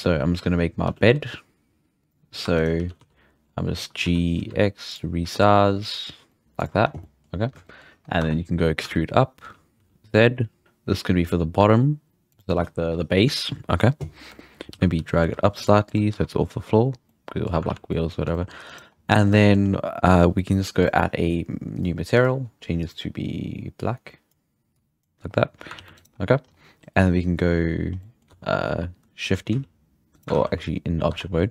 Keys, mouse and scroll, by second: 0.8 g, 2.4 2, 2.5 right drag, 2.8 g, 5.8-6.4 middle drag, 6.4 g, 6.8 Tab, 7.0-8.1 middle drag, 8.1 Tab, 8.4-8.8 scroll up 1, 8.8 e, 14.1-14.7 scroll up 4, 14.3 shift+middle drag, 14.7 a, 14.9 g, 16.1 Tab, 16.6-17.0 scroll down 2, 17.0-17.7 middle drag, 17.7 alt+a, 17.9-18.7 middle drag, 18.7 right drag, 18.9 scroll down 1, 19.0-19.5 middle drag, 19.5 scroll up 3, 20.8 click, 21.7-22.9 drag, 25.7 alt+a, 26.0 right click, 26.1 scroll down 4, 26.4-27.3 scroll up 3, 27.3-27.9 scroll down 1, 27.9 scroll up 2, 28.0 middle drag, 28.3 Tab, 29.2 shift+d, 30.3 ctrl+z, 31.1 Tab.